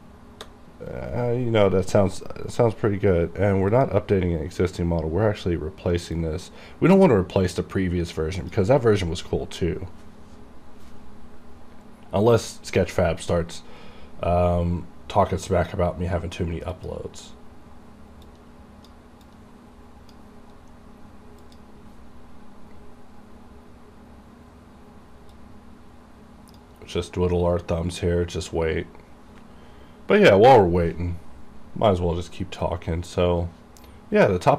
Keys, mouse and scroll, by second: 3.8 click, 6.3-8.3 drag, 8.3-11.1 drag, 16.8-21.5 drag, 25.5-34.5 drag.